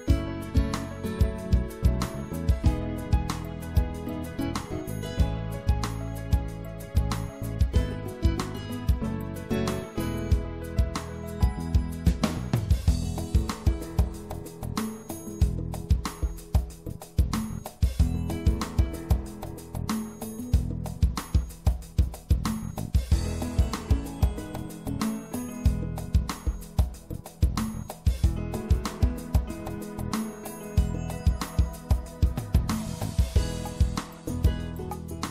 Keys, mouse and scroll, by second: 1.1-3.0 drag, 4.5-6.1 right drag, 6.5-8.7 right drag, 8.7-10.9 drag, 10.9 right click, 11.1-16.5 middle drag, 16.5-21.7 drag, 20.8 middle click, 21.9 click, 22.0 middle click, 26.1 click, 30.5-31.8 middle drag, 32.0 middle click, 32.2-33.3 drag, 33.3 middle click, 33.7 middle click.